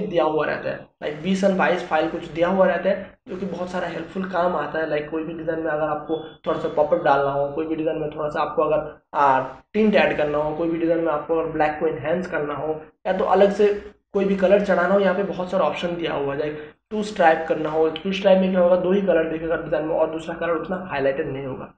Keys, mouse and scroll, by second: 16.0 click, 21.2-21.7 scroll down 1.